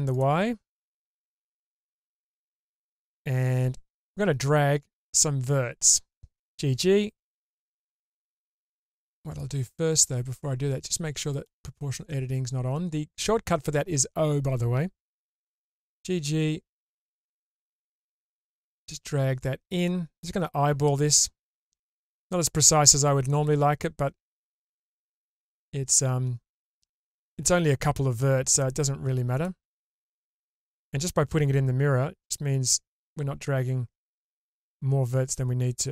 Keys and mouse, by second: 0.1 click, 2.4-6.5 drag, 6.5 g, 9.9 ctrl+z, 11.3 click, 15.7 g, 23.3 g, 29.3 click, 29.9 g.